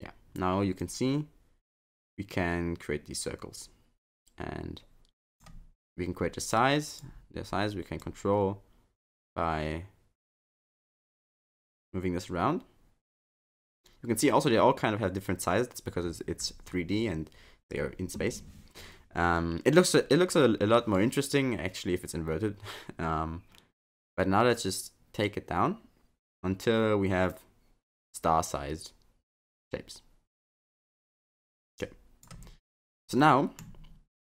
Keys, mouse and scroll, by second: 0.9 click, 6.5 click, 8.0 click, 32.8 middle click.